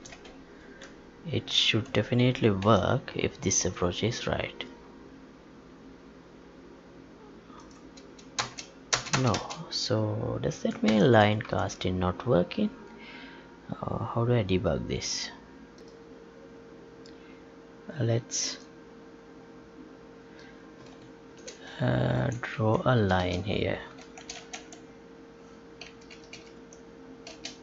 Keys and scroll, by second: 0.8 alt+Tab, 2.6 ctrl+p, 8.3 space, 10.8 ctrl+p, 11.5 alt+Tab, 22.1 ctrl+c, 22.5 Up.